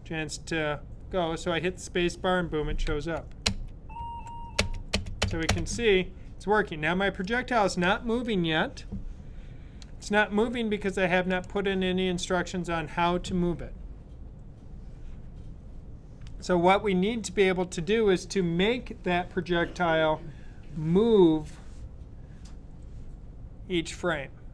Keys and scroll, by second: 2.8 Left, 5.1 Left.